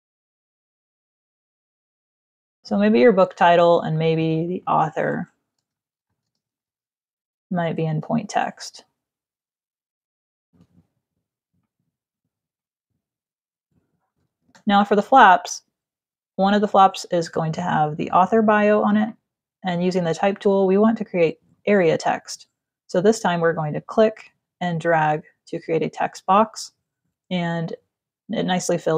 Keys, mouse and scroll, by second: 0.0-2.0 typing, 1.8 ctrl+click, 2.2 click, 3.2 alt+shift+click, 4.1 click, 5.8-6.9 typing, 7.5 ctrl+click, 9.3 click, 9.9 click, 11.2 shift+click, 12.2 click, 14.2 space, 14.4 click, 19.3 click, 23.7 click.